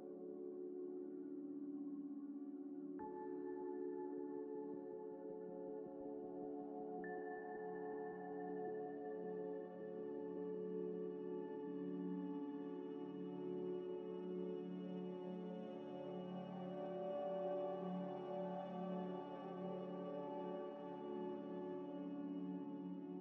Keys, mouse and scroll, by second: 0.4 g, 0.4 z, 1.3 ctrl+a, 1.8 Tab, 2.4 Tab, 2.6 ctrl+a, 3.1 Tab, 3.5 middle click, 4.1 Tab, 4.5 middle click, 4.5 middle click, 7.3 Tab, 7.5 middle click, 8.0 middle click, 8.7 2, 10.2 middle click, 10.8 alt+shift+click, 11.3 ctrl+b, 12.9 Tab, 13.4 s, 13.6 x, 14.4 middle click, 14.9-16.0 typing, 16.8 middle click, 17.5 g, 17.6 z, 18.6 shift+click, 20.3 ctrl+-, 21.7-23.1 typing.